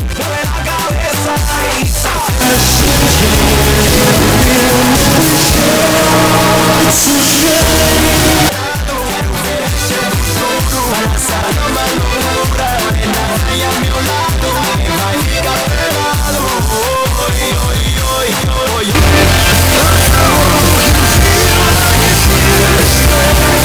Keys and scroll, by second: 8.7 Page_Down.